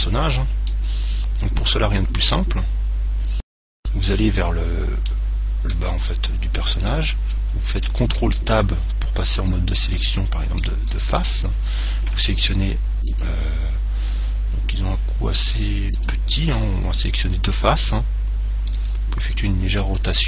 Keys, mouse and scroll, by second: 0.9-2.6 middle drag, 5.9 Tab, 8.4 ctrl+Tab, 10.2-12.8 right drag, 17.2-19.2 middle drag, 19.0 r.